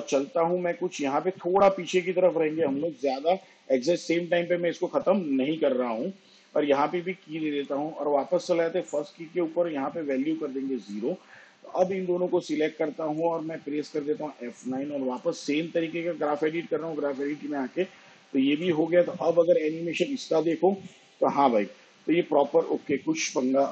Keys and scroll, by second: 11.8 0, 15.7 F9, 22.7 space.